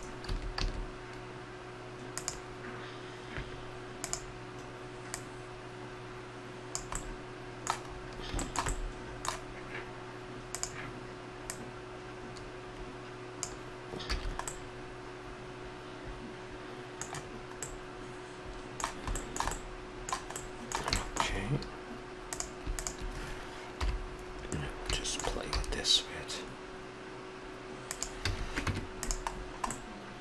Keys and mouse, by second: 0.3 a, 0.5 a, 2.2-3.9 drag, 4.0 click, 5.1-7.0 drag, 7.0-10.5 middle drag, 10.5-13.4 drag, 14.1 a, 14.5 middle click, 17.6 middle click, 19.9 middle click, 20.5 middle click, 22.2-23.7 drag, 22.2-23.5 right drag, 23.7 KP_7, 25.5 g, 28.2 a, 28.7 Tab.